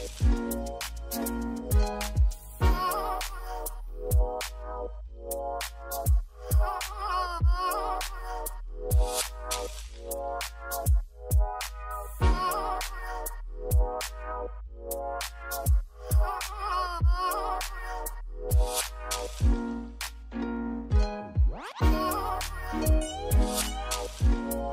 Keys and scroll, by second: 4.8-6.2 typing, 6.8 Return, 8.1 z, 11.8 i, 14.9 i, 19.7 d, 21.1 6, 21.4 Return, 22.3 4, 22.4 Return, 23.6 6, 23.9 Return, 23.9 2, 24.4 Escape.